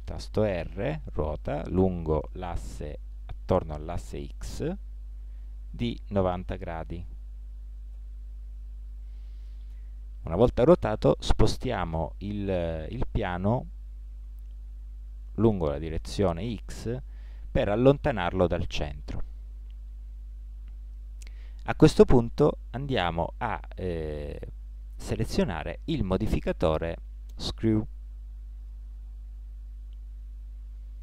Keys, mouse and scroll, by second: 0.5 r, 13.6-15.4 drag, 19.1-21.8 middle drag, 24.7-26.5 drag.